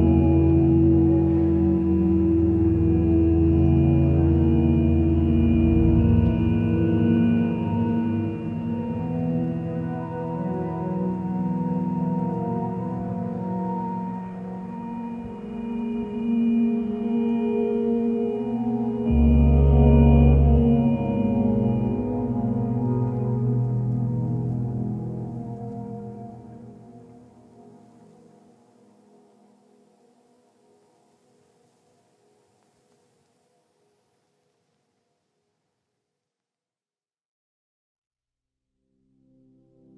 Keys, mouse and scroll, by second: 1.1 ctrl+z, 1.4 ctrl+space, 34.3 ctrl+z, 37.2 ctrl+space.